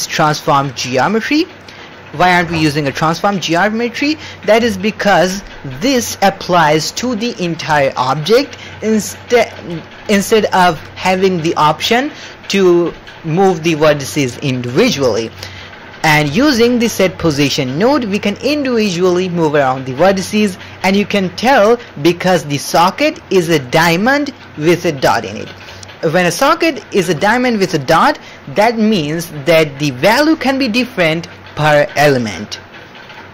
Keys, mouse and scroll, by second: 3.5 click, 4.3 middle click, 4.8 shift+click, 6.0 shift+click, 16.1 click, 16.3 ctrl+x, 16.7 middle click, 17.2 click, 17.9 middle click, 21.2-21.9 middle drag.